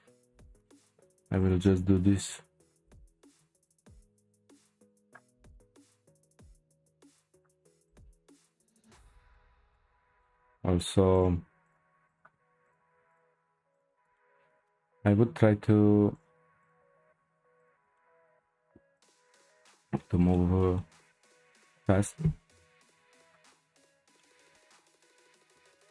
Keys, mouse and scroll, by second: 0.7 click, 1.4 click, 2.2 shift+click, 2.6 shift+click, 3.4 c, 5.5-7.0 middle drag, 7.0 shift+click, 7.3 shift+click, 7.8 shift+click, 8.5 shift+click, 8.8-10.8 middle drag, 10.8 shift+click, 11.1 shift+click, 11.6 shift+click, 12.1 shift+click, 12.6 shift+click, 13.1 shift+click, 13.7 shift+click, 14.2-16.1 shift+middle drag, 16.1 shift+click, 16.6 shift+click, 17.6 shift+click, 17.9-18.9 middle drag, 18.9 shift+click, 19.7-22.5 middle drag, 22.5 p, 23.8-24.2 scroll down 2, 24.2-25.9 middle drag.